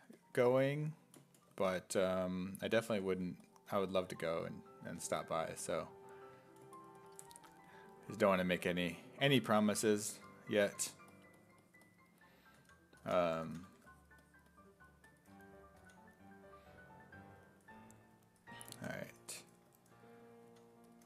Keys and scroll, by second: 2.9 1, 4.9 s, 7.4 1, 8.7 1, 12.3-14.2 typing, 15.8 s, 20.4 s.